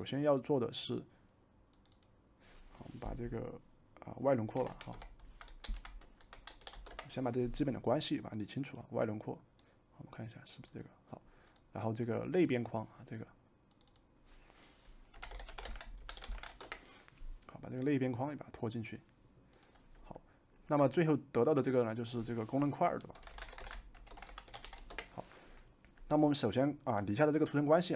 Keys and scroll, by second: 4.3-7.1 typing, 14.8-16.9 typing, 22.8-25.1 typing.